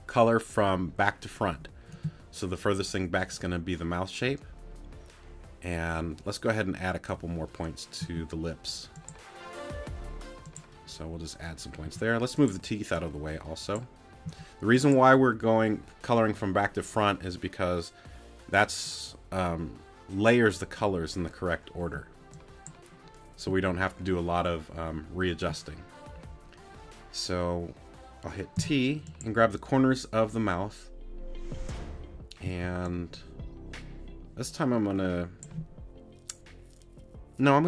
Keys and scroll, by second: 8.0 a, 11.8 t, 14.2 a, 28.6 t, 32.4 c.